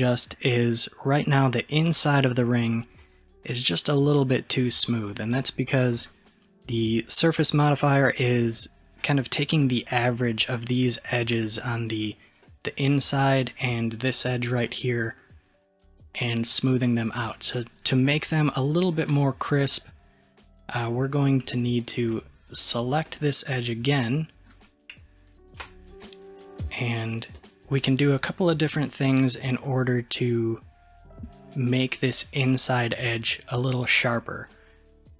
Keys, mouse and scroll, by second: 8.8-11.3 scroll up 2, 11.3-15.7 middle drag, 15.7-16.3 scroll down 1, 16.3-18.7 scroll down 1, 19.1-22.1 middle drag, 22.5 alt+click, 23.1-25.5 middle drag, 25.5 alt+shift+click, 26.1-32.3 middle drag.